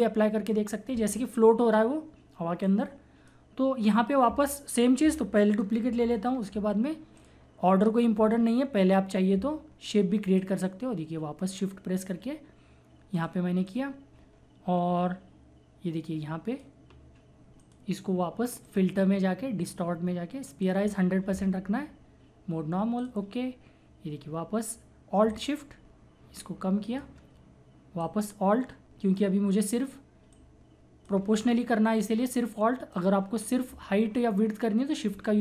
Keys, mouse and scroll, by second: 2.6-5.9 drag, 5.9 ctrl+j, 7.2 click, 10.4-18.8 drag, 23.0 click, 25.1 typing, 25.3-30.4 alt+shift+drag, 30.4-35.4 alt+drag, 30.4 typing, 31.7 typing, 35.1-35.4 typing.